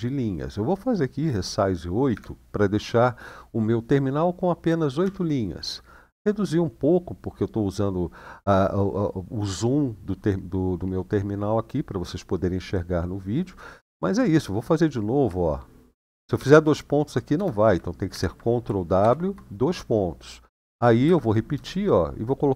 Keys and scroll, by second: 1.9 typing, 4.8 Return, 16.1 shift+;, 17.9 ctrl+w, 18.8 shift+;, 20.8 Up, 21.3 BackSpace.